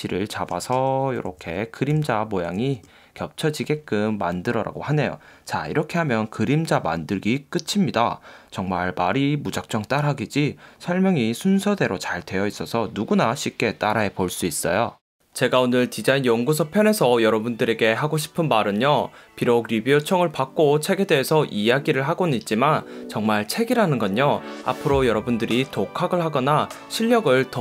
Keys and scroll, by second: 1.5 Down, 2.6 Down, 2.7 Left, 2.9 Right.